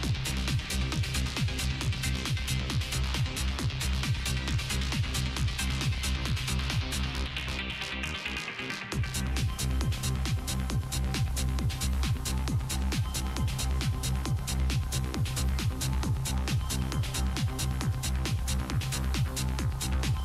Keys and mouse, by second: 0.4 g, 2.0-3.0 drag, 3.0-5.2 middle drag, 4.5 g, 6.0 g, 8.4 f, 8.8 ctrl+Tab, 10.3 ctrl+x, 11.1 Tab, 12.3 Tab, 14.2 shift+e, 14.7 Tab, 15.5 Tab, 15.8 Tab, 16.8 Tab, 17.8 click, 18.5 e.